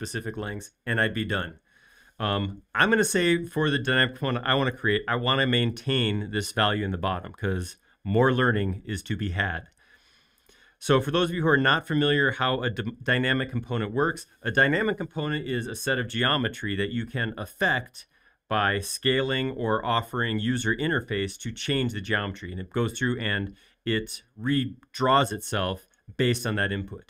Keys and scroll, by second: 2.6 super+z.